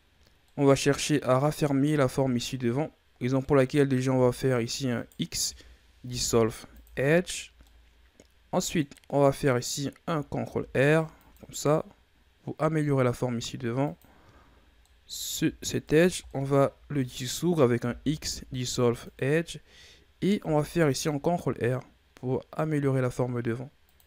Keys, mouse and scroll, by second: 2.2-3.4 shift+scroll up 2, 3.4-4.9 middle drag, 4.9 alt+right click, 6.0 x, 7.6-10.4 middle drag, 10.4 ctrl+r, 14.8 middle click, 15.7 alt+right click, 16.2-17.7 middle drag, 17.7 x, 20.3 ctrl+r.